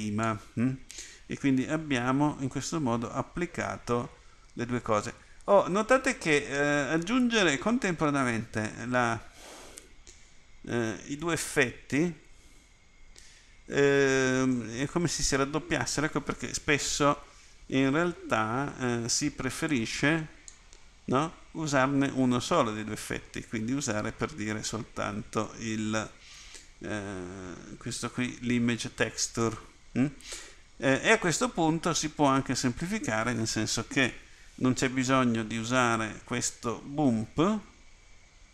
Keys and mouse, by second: 19.9 click.